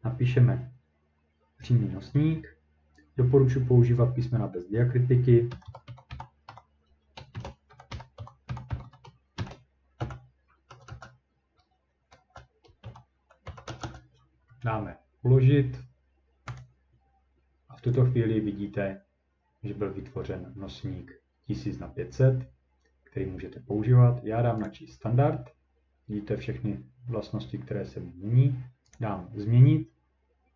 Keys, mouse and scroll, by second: 5.3-10.7 typing, 12.1-14.2 typing, 16.6 click, 18.0 click, 24.7 click, 28.9 click.